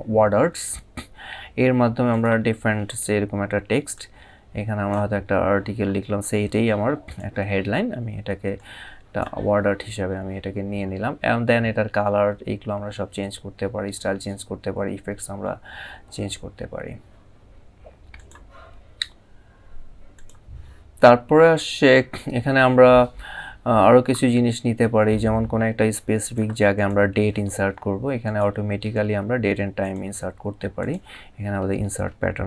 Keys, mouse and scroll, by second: 0.2 click, 1.8 click, 3.6 click, 6.8 click, 8.2 click, 17.8 click, 19.8 click, 25.9 click, 27.9 click, 29.5 click.